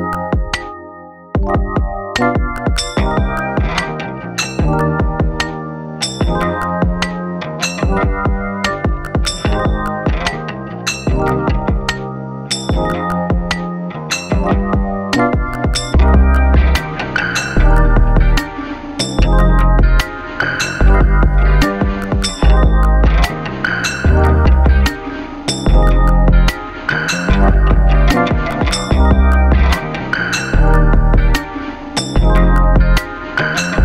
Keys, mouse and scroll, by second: 14.9 click, 17.2 F8, 19.8-30.3 drag.